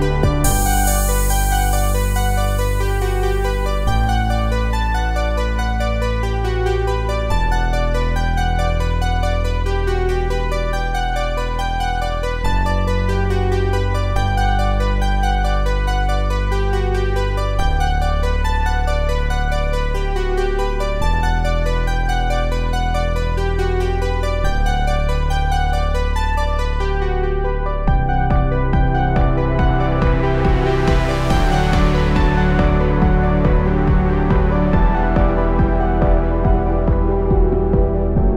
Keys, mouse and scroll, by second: 1.7-4.3 typing, 6.2-6.9 typing, 7.9 [, 12.7 [, 15.8 click, 19.6 click, 21.9-24.2 drag, 30.2 click, 34.1 click, 34.2 click.